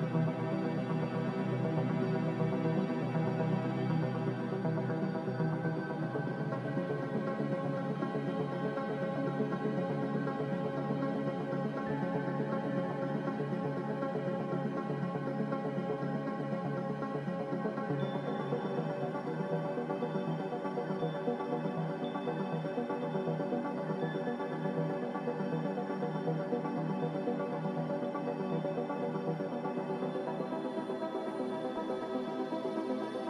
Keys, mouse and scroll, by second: 6.1 b, 7.7 ctrl+b, 15.0 b.